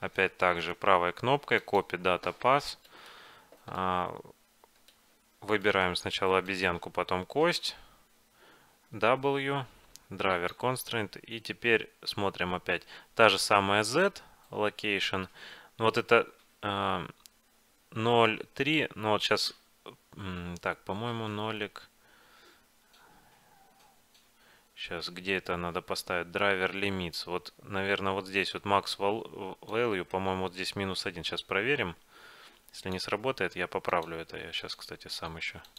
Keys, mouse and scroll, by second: 0.7-3.0 right drag, 3.0-5.6 middle drag, 5.8-8.4 right drag, 9.0 w.